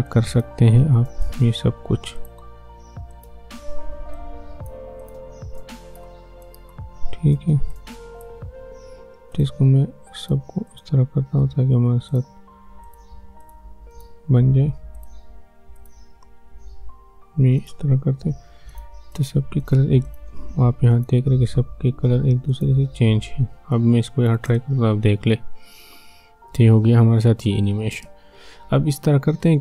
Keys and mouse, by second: 24.4 space, 27.9 space.